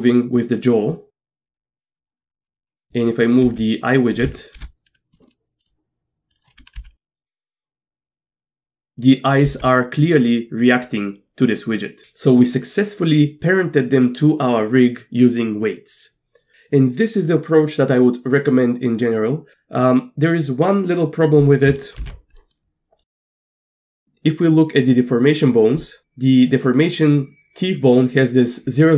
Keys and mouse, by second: 1.5 Tab, 1.8 right click, 2.1 shift+middle click, 2.5 z, 2.8 z, 3.5 g, 4.6 shift+h, 5.6 click, 6.8 g, 9.5 g, 22.1 alt+h, 23.2 middle drag, 23.8-25.4 middle drag, 25.8 click.